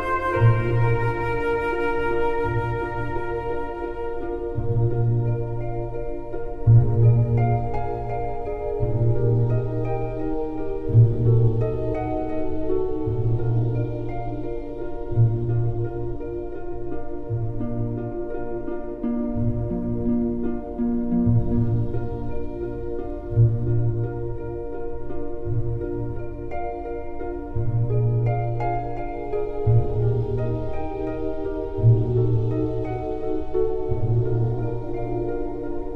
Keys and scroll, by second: 13.0 KP_Divide.